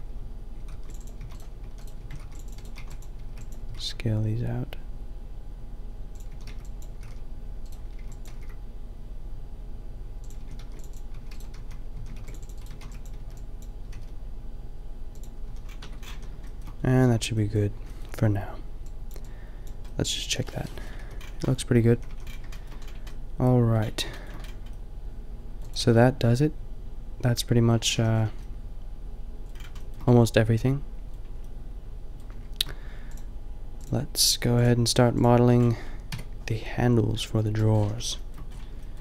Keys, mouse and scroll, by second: 0.7 ctrl+r, 1.2-3.7 typing, 2.2 ctrl+r, 4.4-6.0 drag, 6.3 a, 6.6 b, 7.0 g, 8.0 b, 8.4 g, 10.4-13.8 typing, 10.7 ctrl+r, 12.2 ctrl+r, 15.5 a, 15.8 Tab, 16.1 a, 20.5-20.9 middle drag, 21.0 KP_5, 21.9 a, 22.1 a, 25.7-27.4 middle drag, 25.8 a, 27.9 a, 28.5-30.8 middle drag, 36.1 KP_5.